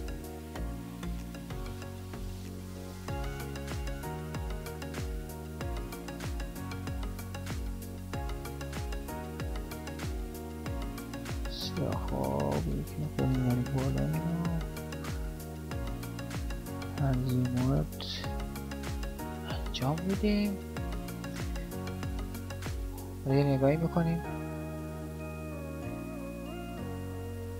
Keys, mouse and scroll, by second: 6.8 right click, 11.8 right click, 17.1 right click, 22.9 alt+a.